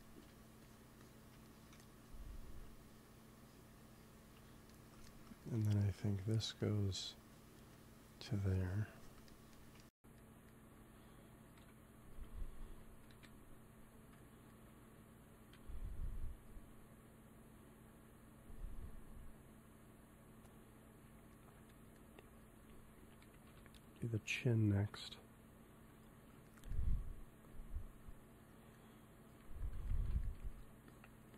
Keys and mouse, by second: 4.7 middle click, 6.1-10.6 drag, 9.2-10.6 middle drag, 10.6 ctrl+s, 11.5 KP_1, 12.0 KP_3, 13.0 KP_1, 15.5 KP_3, 21.2-23.4 middle drag, 23.4 KP_1, 24.4-26.4 middle drag, 27.3-29.1 drag, 29.3 f, 29.5-31.3 drag, 30.4 f.